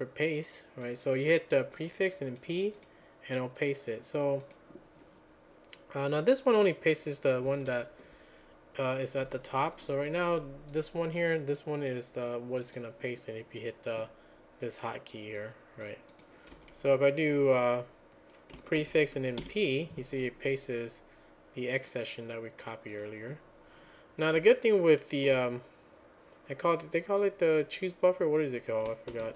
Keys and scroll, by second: 8.1 alt+j, 16.6 q, 18.8 ctrl+a, 19.4 p, 29.2 ctrl+a.